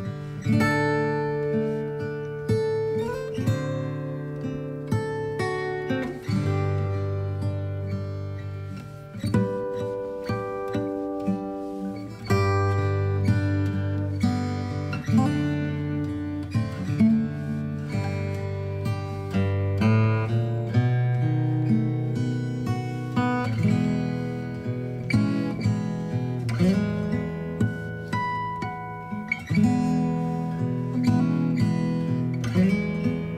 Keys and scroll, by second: 25.2 b, 25.7 alt+x, 28.5 alt+space, 32.8 ctrl+j.